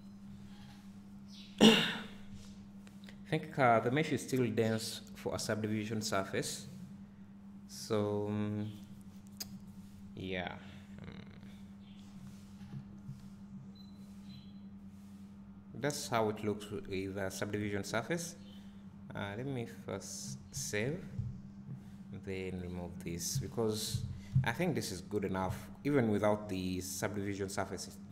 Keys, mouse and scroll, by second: 11.3 click, 13.1 `, 22.6 click, 24.0-24.3 scroll down 1.